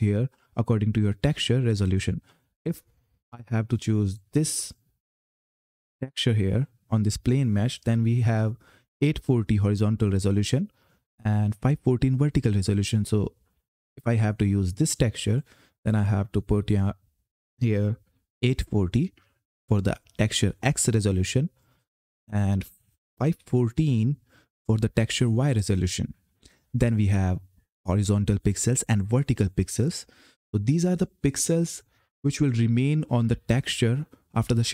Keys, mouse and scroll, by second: 0.4 click, 2.9 click, 13.2 click, 21.3 click.